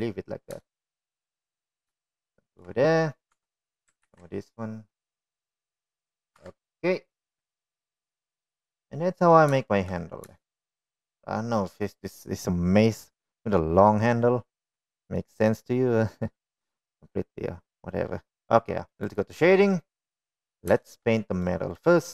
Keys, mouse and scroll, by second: 0.7 ctrl+r, 2.9 Tab, 3.0 click, 3.7-4.2 shift+middle drag, 5.3-5.7 shift+middle drag, 6.5 Tab, 7.2 ctrl+r, 9.3 click, 9.6 Tab, 10.2 click, 10.8-11.3 middle drag, 11.7-12.3 middle drag, 13.5 shift+middle click, 17.9-18.3 middle drag.